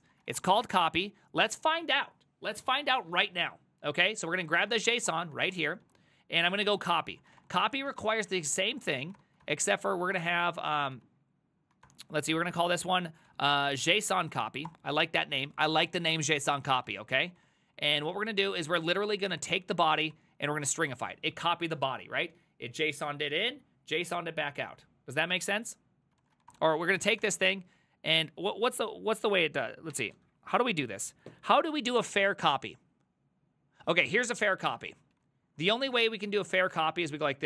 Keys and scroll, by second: 0.0-1.3 typing, 2.7-11.9 typing, 12.6 Left, 12.8 Left, 12.9 Left, 13.3 ctrl+w, 13.5-21.2 typing, 15.9 Return, 16.3 ctrl+c, 16.4 ctrl+c, 26.1-27.3 typing, 34.9-37.4 typing.